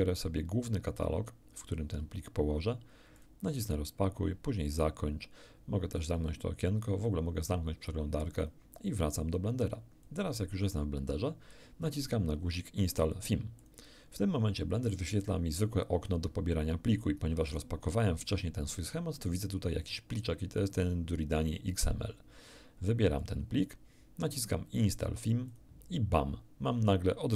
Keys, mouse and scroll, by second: 3.1 click, 4.7 click, 6.1 click, 8.4 click, 10.0-11.7 drag, 13.6 click, 23.2 click, 25.5 click.